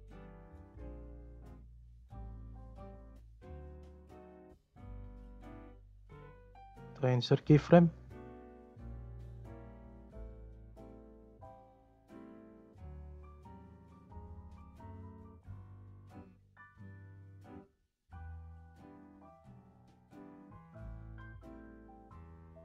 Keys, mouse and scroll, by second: 0.2-0.6 scroll down 2, 0.6 click, 1.0 click, 1.4 click, 1.6-2.3 scroll up 7, 2.3-4.0 middle drag, 4.0-5.9 scroll down 1, 5.9-8.6 right drag, 8.6-11.3 drag, 11.3-11.7 scroll down 2, 11.9-12.8 scroll up 3, 13.1-14.6 scroll down 1, 14.6 shift+middle click, 15.5 click, 17.0-18.1 drag, 18.1 scroll up 1, 18.8-20.9 drag, 20.9-21.4 scroll up 12, 21.4 middle click, 21.8-22.6 scroll up 1.